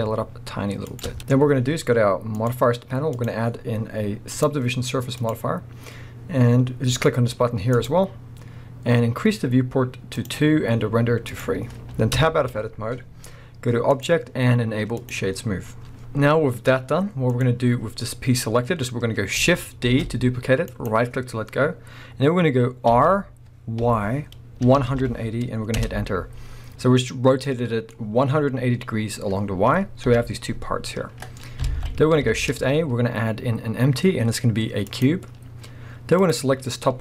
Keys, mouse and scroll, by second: 1.0 shift+click, 1.2-2.3 middle drag, 2.3 click, 3.2 click, 4.3-7.9 drag, 10.2-17.4 drag, 12.2 Tab, 15.8-16.2 scroll down 2, 16.2-17.3 scroll up 2, 19.9 shift+d, 20.8 right click, 22.9 r, 25.9 Return, 26.5-27.4 scroll down 2, 27.4-36.2 middle drag, 30.1 KP_1, 31.6 alt+a, 32.3 shift+a, 36.2 click.